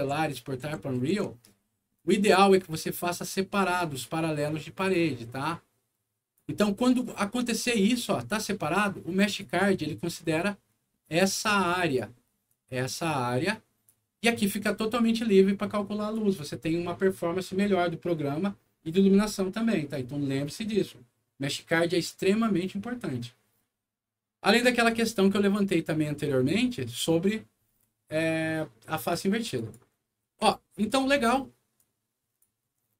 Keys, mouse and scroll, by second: 1.9 ctrl+click, 2.5-3.9 ctrl+drag, 3.6 ctrl+right click, 4.7 ctrl+click, 5.3 ctrl+click, 6.9-8.0 ctrl+drag, 9.2 ctrl+click, 10.2-11.9 ctrl+drag, 12.4-13.8 drag, 14.3-16.1 drag, 22.0 right click, 24.8 click, 29.5 click, 30.2 w, 30.8 click, 31.7 click.